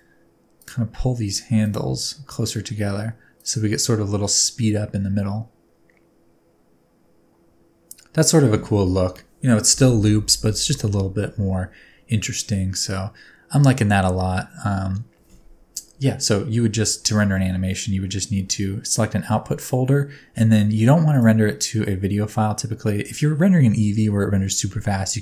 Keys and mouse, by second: 0.6 click, 1.7 click, 1.9 s, 16.8 space, 21.2-22.3 drag.